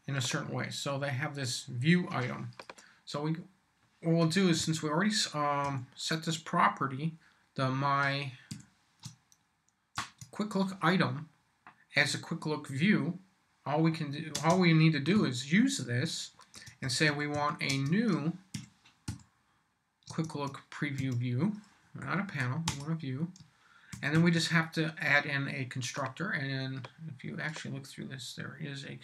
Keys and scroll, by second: 4.6 m, 5.6 y, 8.5 shift+q, 10.0 shift+Tab, 14.3 space, 15.1 =, 16.5-19.1 typing, 20.2 shift+Tab, 22.0 Up, 22.7 Return, 23.4 shift+Return, 23.7-24.6 typing.